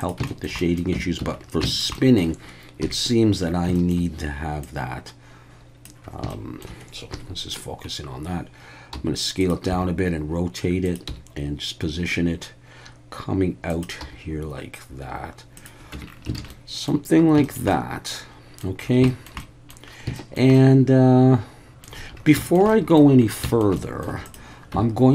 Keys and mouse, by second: 0.0 click, 0.3 shift+middle drag, 0.6 middle click, 0.9 Tab, 1.2 a, 1.7 shift+middle click, 1.9 middle click, 2.8 KP_3, 3.8 shift+middle click, 4.6-5.8 drag, 6.3 shift+middle click, 7.1 KP_Decimal, 8.9 s, 9.4 click, 9.7 r, 10.8 click, 11.1 g, 13.7 click, 14.0 r, 15.6 click, 15.9 Tab, 16.4 alt+a, 16.5 middle drag, 16.6 click, 16.6 middle click, 17.4 shift+middle click, 17.7-18.6 middle drag, 19.1 shift+middle drag, 19.4-19.7 middle drag, 20.2 shift+middle drag, 20.5-21.8 middle drag, 22.4 shift+middle drag, 22.7-23.0 middle drag, 23.5 shift+middle click, 23.8 middle click, 24.7 Tab.